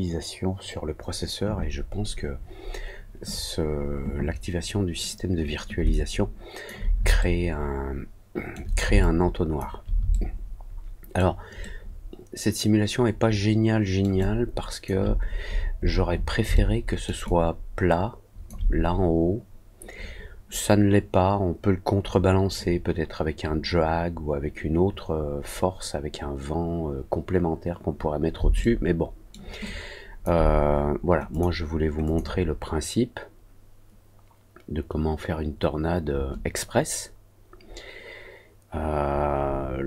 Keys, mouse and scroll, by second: 5.8 alt+click, 7.1-8.5 alt+middle drag, 8.9 alt+click, 10.0-11.1 alt+middle drag, 11.5-14.0 alt+middle drag, 14.1 alt+click, 15.1-15.6 scroll down 2, 15.6 scroll up 1, 15.7-16.3 scroll down 2, 16.5 alt+middle click, 17.2-18.4 alt+drag, 28.5 alt+middle click, 29.6 alt+click, 31.2 click, 32.0 click.